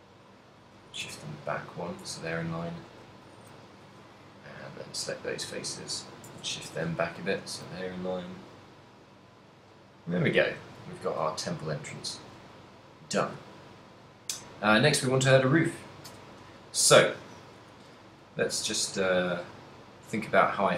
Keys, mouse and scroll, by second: 0.7 click, 1.2 Tab, 1.8 right click, 2.1 Tab, 2.4 a, 3.0 b, 3.5 right click, 3.5 a, 4.6 b, 4.9 g, 6.1 click, 6.4 Tab, 6.7 z, 6.8 middle click, 7.8 middle click, 7.8 a, 11.0 ctrl+middle click, 11.6 middle click, 12.2 ctrl+middle click, 12.7 middle click, 16.2 KP_1, 17.2 shift+middle click, 18.2-20.7 typing, 19.5 click.